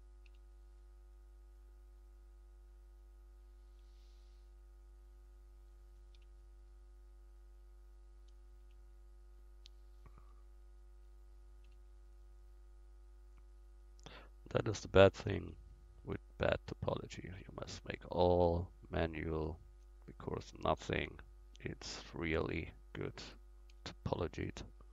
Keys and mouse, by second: 0.3 f, 6.2 f, 8.6 f, 11.7 f, 15.5 f, 17.8 f, 20.9 f, 21.3 click, 22.2-23.7 drag, 23.7 f.